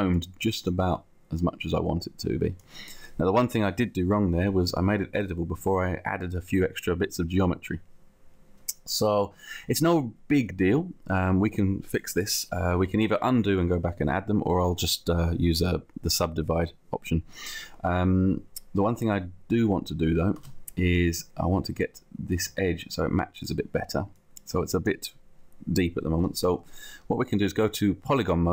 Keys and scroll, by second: 20.4 space, 21.5 space.